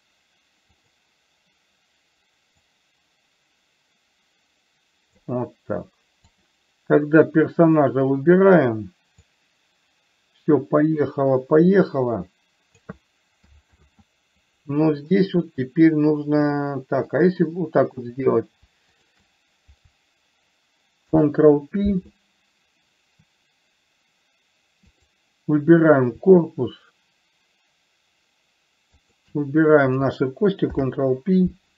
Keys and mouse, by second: 1.1 click, 3.1-5.6 drag, 6.6 click, 9.6-13.3 drag, 14.1 ctrl+z, 15.5-16.8 middle drag, 21.4 ctrl+p, 25.1 click, 29.3 shift+click, 31.1 ctrl+p.